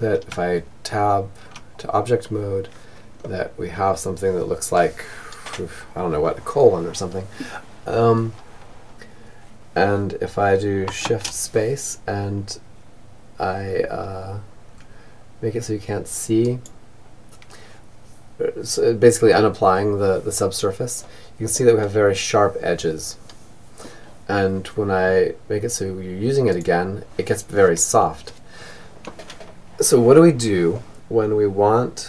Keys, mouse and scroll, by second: 0.8-3.7 middle drag, 7.9-9.9 middle drag, 9.4 shift+space, 14.8-19.3 drag, 19.9-21.8 middle drag, 24.9-26.5 drag, 26.6 click, 29.1-31.2 middle drag, 31.5 Tab.